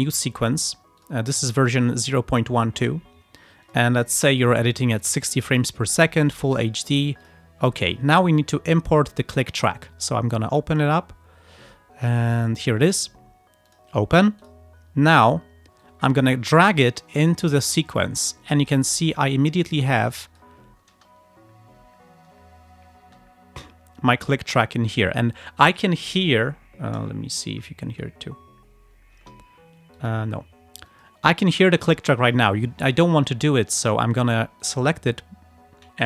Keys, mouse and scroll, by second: 0.1 click, 1.1 click, 1.8 click, 3.7 click, 5.0 click, 6.2 click, 7.3 click, 7.9 right click, 9.4 click, 11.2 scroll down 2, 11.9 scroll up 2, 12.7 click, 13.8 click, 14.5 click, 15.9-17.8 drag, 18.7 click, 20.0 click, 21.0 space, 23.1 space, 27.4 click, 28.0 space, 29.2 space, 30.0 click, 31.0 click, 32.4 click, 34.7 click.